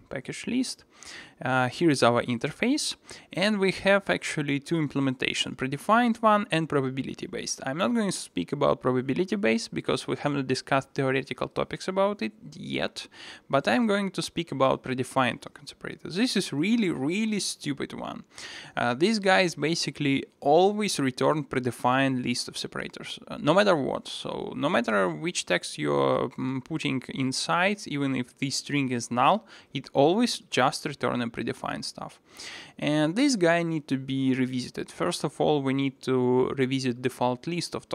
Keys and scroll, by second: 17.0 super+1.